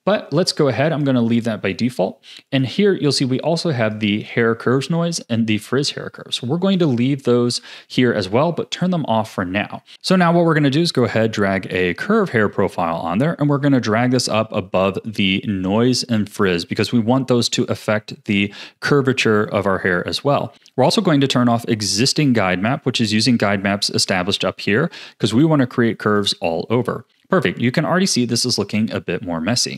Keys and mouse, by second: 0.9 click, 2.4 click, 3.0 click, 3.8 click, 13.5-14.8 drag, 26.1 click.